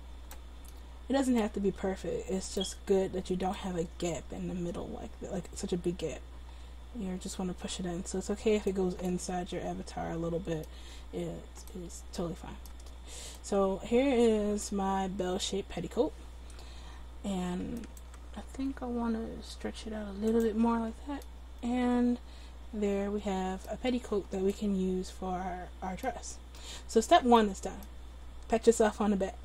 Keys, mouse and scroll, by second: 2.5-3.6 middle drag, 3.6-6.6 drag, 3.6 right click, 9.2 middle click, 17.8-19.9 right drag, 18.6 s, 19.9 middle click, 20.4-22.0 drag.